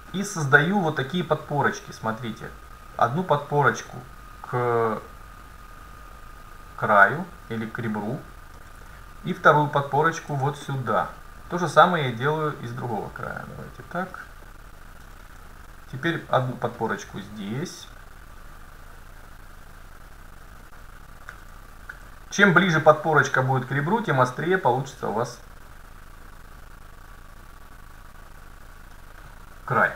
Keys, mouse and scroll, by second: 7.5-9.3 drag, 8.6 a, 10.2 ctrl+r, 15.1 a, 16.3 ctrl+r, 21.4 a, 22.5 ctrl+r, 26.3-28.6 drag, 29.8 a.